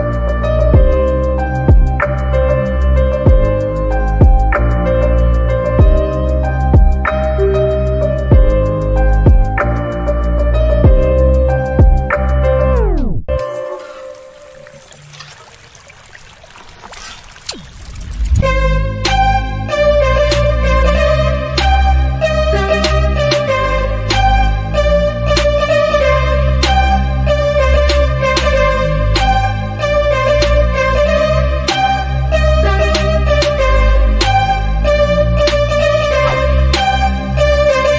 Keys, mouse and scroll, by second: 0.0 click, 1.6 click, 2.2 ctrl+t, 4.4-6.1 drag, 6.4 click, 8.2 click, 8.9 Down, 11.4 Up, 13.8 Down, 14.2 Up, 16.5 Up, 16.8 ctrl+j, 18.6 click, 21.4 space, 21.7 click, 21.8 space, 22.4 click, 22.9 x, 23.3-26.0 drag, 26.8 click, 27.1 click, 27.5 click, 28.7 click, 30.4 click, 34.7 Down.